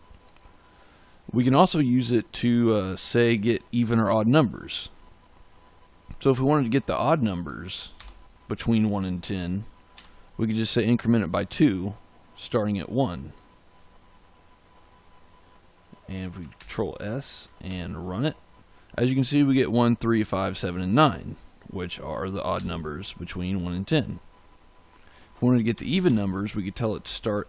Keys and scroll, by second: 7.9 BackSpace, 9.9 2, 16.5 ctrl+s, 17.6 ctrl+shift+z, 22.5 j, 25.7 Left, 27.0 BackSpace.